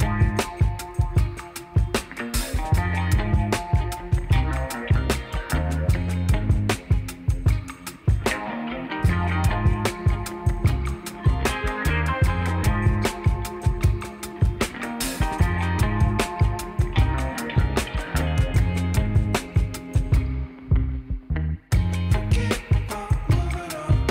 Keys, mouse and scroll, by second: 7.5 Tab, 10.0-18.4 alt+middle drag, 10.4 alt+s, 18.4-19.5 shift+drag, 19.5 Tab, 19.5-24.1 right drag.